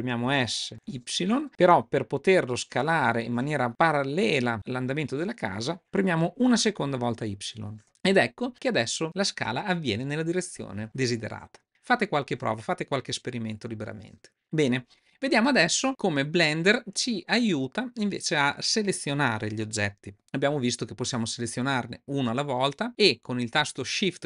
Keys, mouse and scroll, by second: 20.9 click, 21.9 click.